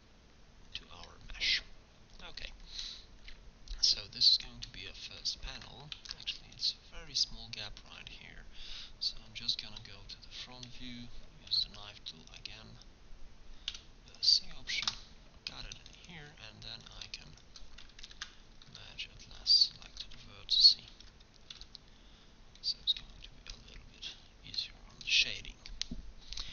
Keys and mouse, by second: 6.0 ctrl+Tab, 9.9 KP_1, 11.5 k, 17.9 right click, 18.2 ctrl+v, 19.3 middle click, 20.9 ctrl+v, 21.8 middle click.